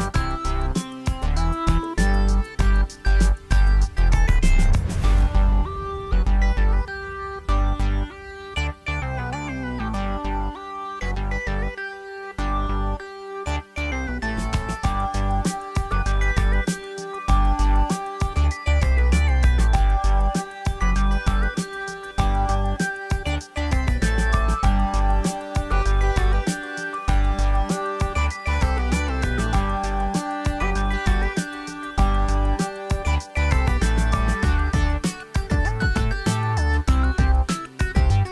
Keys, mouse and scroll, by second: 26.6 click.